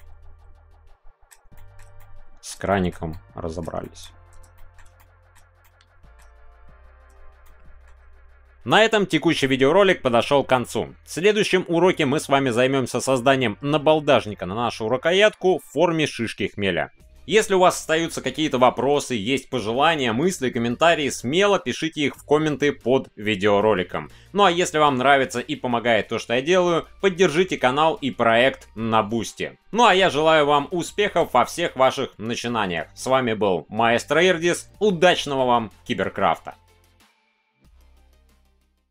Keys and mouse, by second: 1.5 middle click, 2.0 middle click, 2.7 shift+middle click, 3.1 middle click, 3.8 shift+middle click, 4.5 shift+middle click, 4.9-5.3 middle drag, 5.6 shift+middle click, 7.7 shift+middle click.